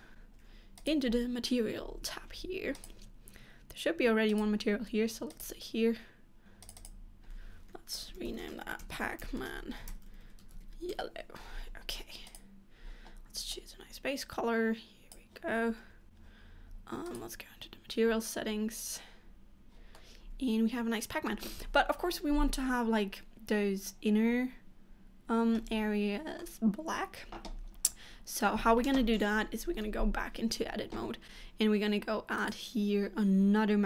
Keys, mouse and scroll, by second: 16.1 Tab, 19.4 click, 20.1 middle click, 21.5 scroll up 1, 25.8 middle click, 27.7-28.1 scroll down 2, 28.1 middle click, 29.6 Tab.